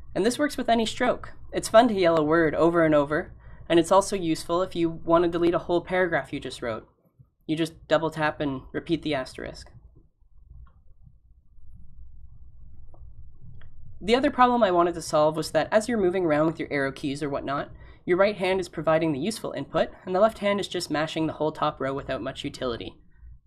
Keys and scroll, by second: 1.0 a, 1.2 a, 8.0 *, 8.9 *.